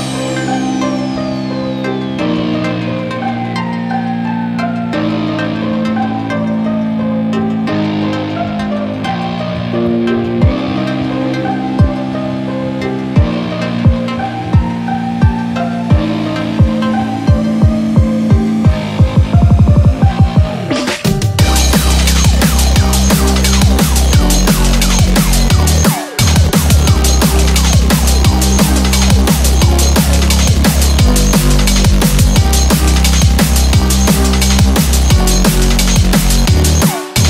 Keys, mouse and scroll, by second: 1.5-1.8 scroll up 1, 1.5 1, 2.6 scroll up 1, 3.0 click, 4.1 g, 5.1 click, 5.2-8.1 typing, 6.0 click, 7.0 click, 7.8 click, 8.0 click, 9.1 click, 9.2 g, 9.4 g, 10.7 click, 10.7 g, 10.8 g, 11.6 click, 11.7 g, 12.7 click, 12.8 click, 12.8 g, 12.9 g, 14.1 click, 14.1 g, 14.3 g, 15.4 click, 15.4 g, 15.5 g, 16.7 click, 16.8 g, 18.3 click, 18.3 g, 18.4 g, 20.0 click, 20.0 g, 20.1 g, 21.7 click, 21.7 g, 21.8 g, 23.6 click, 23.6 g, 23.7 g, 25.8 g, 28.0 click, 28.0 g, 30.3 click, 30.3 g, 30.5 g, 32.6 click, 32.6 g, 32.7 g, 36.0 g.